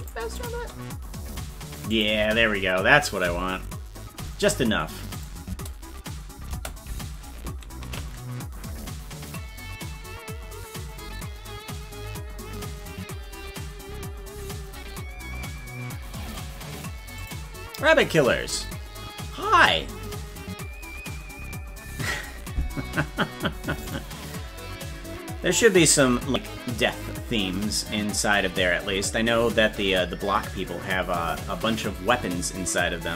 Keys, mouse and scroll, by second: 0.4 click, 0.5 space, 1.9 click, 1.9 space, 2.2 space, 5.1 click, 5.4 space, 8.0 ctrl+s.